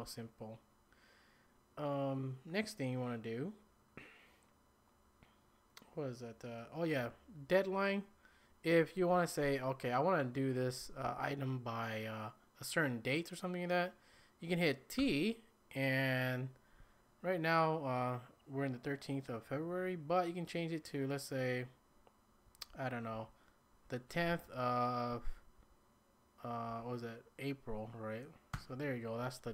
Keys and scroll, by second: 10.4-11.5 typing, 15.0 t, 22.4 Right, 22.7 Down, 23.1 Down, 23.7 Down, 24.3 Right, 24.4 Right, 25.1 Up, 25.3 Up, 25.6 Up, 26.7 Down, 27.3 typing, 28.5 Return.